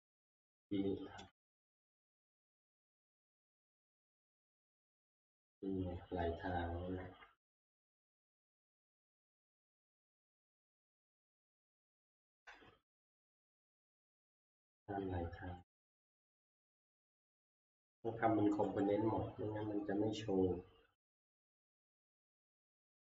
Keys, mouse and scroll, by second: 0.2 alt+Tab, 1.2 alt+Tab, 1.5 alt+Tab, 2.4 middle click, 2.5-3.6 scroll, 4.6 shift+middle click, 5.1-7.0 shift+middle click, 7.0 alt+Tab, 7.0 scroll, 7.3 shift+middle click, 8.5 shift+middle click, 8.8 shift+middle click, 8.9 shift+middle click, 9.0 shift+middle click, 9.0 shift+scroll, 9.6 shift+scroll, 10.3 shift+middle click, 12.0 shift+middle click, 15.3 click, 15.3 shift+scroll, 15.5 F11, 15.5 shift+middle click, 15.7 click, 15.9 click, 16.5 click, 18.8 click, 21.4 click.